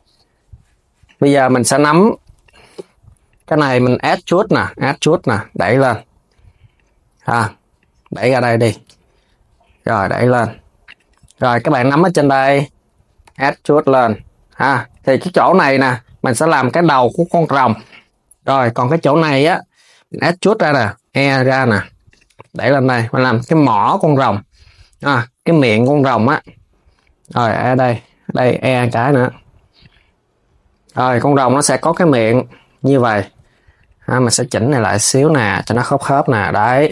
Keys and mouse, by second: 0.7 click, 2.1 click, 3.2 KP_3, 3.7 e, 7.4 click, 8.5 g, 11.6 click, 12.0 KP_3, 12.9 e, 18.3 click, 18.5 KP_3, 20.1 KP_3, 20.6 e, 32.7 click, 33.1 Tab, 33.5 click, 34.1 g, 36.2 Tab, 36.4 click.